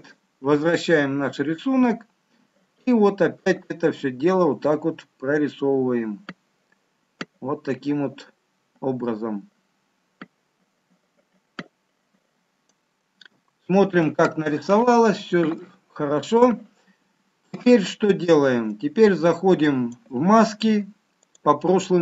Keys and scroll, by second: 13.4 shift+z.